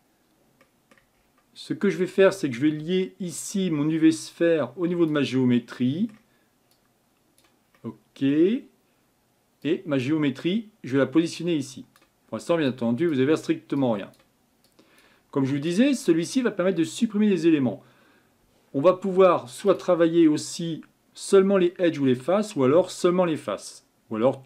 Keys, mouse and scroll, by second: 5.1 click, 5.6-12.0 middle drag, 12.0 click.